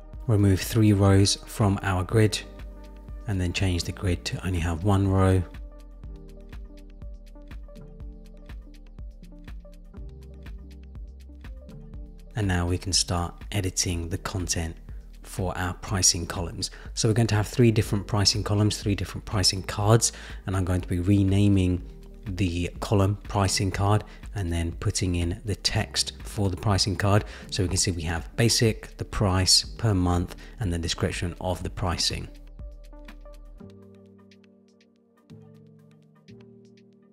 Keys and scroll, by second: 4.9 Return, 19.1 Return, 24.7 super+c, 24.7 super+v, 25.5 super+v, 26.3 super+c, 26.9 super+v.